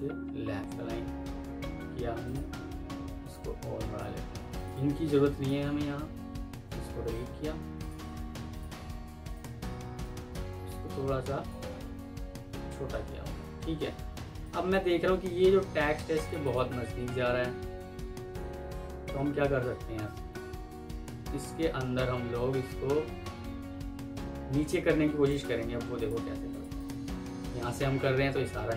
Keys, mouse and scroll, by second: 0.9 Escape, 4.0 Escape, 4.6 double click, 6.2 Delete, 7.9 Escape, 9.2 alt+click, 12.3 F3, 13.9 F2, 14.7 Escape, 16.3 click, 26.6 double click.